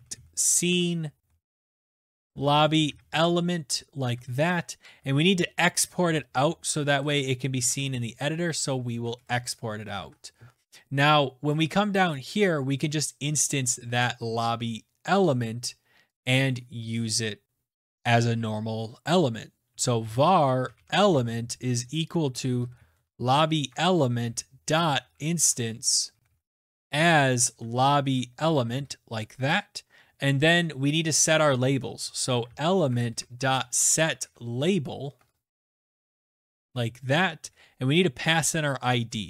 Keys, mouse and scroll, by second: 0.0-4.3 typing, 5.5 Up, 6.0-8.4 typing, 7.4 Up, 9.2 Down, 10.3 ctrl+s, 11.9 click, 11.9 Return, 12.4 click, 13.4-13.8 scroll down 4, 14.1-16.3 scroll down 16, 16.5 click, 19.7-30.9 typing, 20.8 right click, 32.0-37.3 typing.